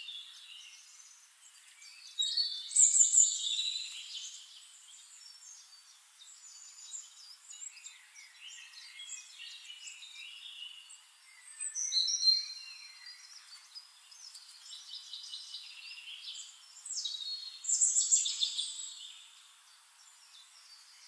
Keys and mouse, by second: 4.6-9.0 drag, 9.1-15.2 drag, 9.7-15.2 shift+right drag, 14.9 middle click, 15.5-20.5 drag, 17.0-20.5 middle drag, 17.0-20.5 right drag, 20.7-21.0 drag.